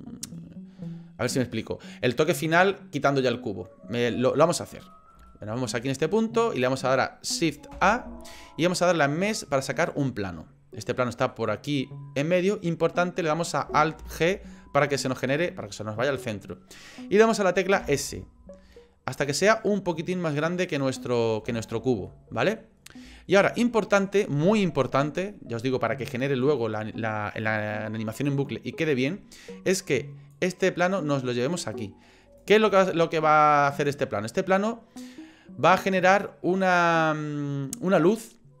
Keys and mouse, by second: 4.9 middle click, 5.3 shift+middle click, 5.8 middle click, 7.7 shift+a, 11.0 middle click, 14.0 alt+g, 17.8 s, 21.1 middle click, 21.7 shift+middle click, 22.1 middle click, 23.3 shift+middle click, 23.7 middle click, 30.3-32.4 drag.